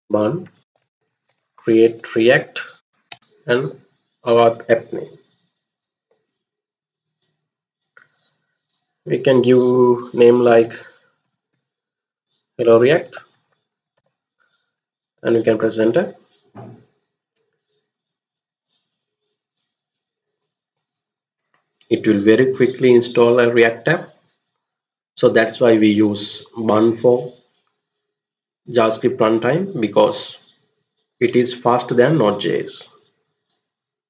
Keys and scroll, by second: 0.0-3.2 typing, 10.1-14.4 typing, 15.7 Return.